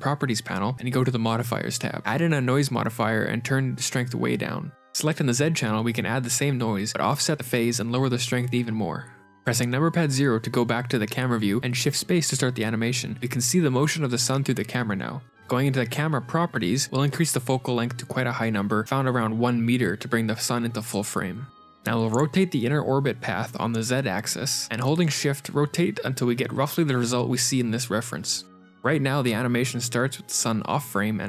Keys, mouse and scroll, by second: 2.4 click, 2.4 n, 2.9 click, 6.0 click, 7.5 shift+click, 9.2 shift+space, 10.5 shift+space, 11.7 scroll down 3, 12.3 shift+middle click, 12.7-13.5 scroll down 4, 15.5 click, 15.9 click, 16.8 click, 20.3 KP_0, 21.0-21.8 scroll down 8, 23.9 scroll down 1, 23.9 r, 28.3 click, 28.3-28.6 scroll down 3, 29.4 click, 30.1 g.